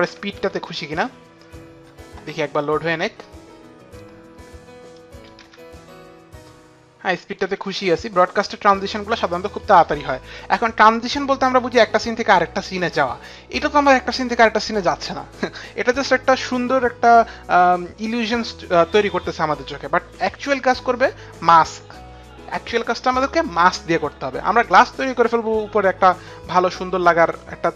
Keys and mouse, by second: 0.4 space, 5.0 click, 5.4 space, 7.1 click, 7.5 space, 8.8 click, 11.0 click.